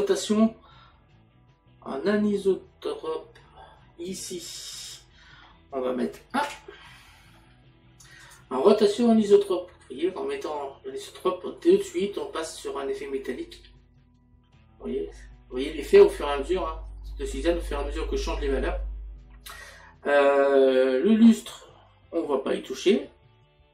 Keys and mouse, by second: 4.1 click, 8.3 click, 12.3 middle click, 16.3 middle click.